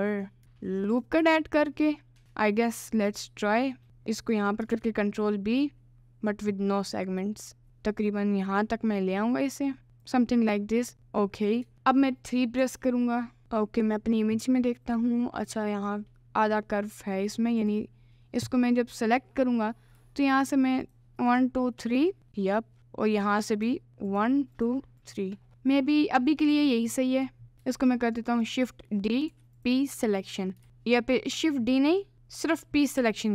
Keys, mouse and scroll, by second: 0.1 middle click, 0.4 ctrl+r, 0.9 click, 2.2 ctrl+r, 4.8 ctrl+b, 11.0 Tab, 11.2 middle click, 11.7 Tab, 11.7 middle click, 12.7 3, 16.2 middle click, 20.4 shift+click, 20.8 shift+click, 21.2 shift+click, 22.2 middle click, 22.8 middle click, 24.5 shift+click, 25.0 shift+click, 25.5 middle click, 26.2 middle click, 27.0 middle click, 27.8 shift+d, 29.2 p, 30.0 Tab, 30.6 ctrl+z, 32.0 middle click, 33.1 p.